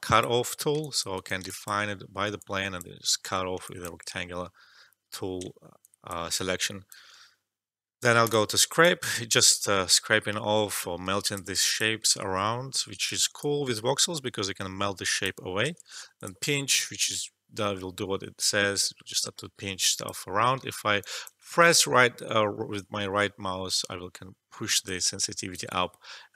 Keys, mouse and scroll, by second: 1.1 right click, 1.7 alt+click, 2.7 click, 4.0 e, 5.4 alt+middle click, 5.7 alt+click, 6.6 click, 9.3-11.8 drag, 12.0 ctrl+z, 13.0-15.6 alt+drag, 15.6 ctrl+z, 16.1-20.7 drag, 20.7 alt+middle click, 20.9 alt+click, 21.4-25.7 right drag, 25.7-26.3 drag.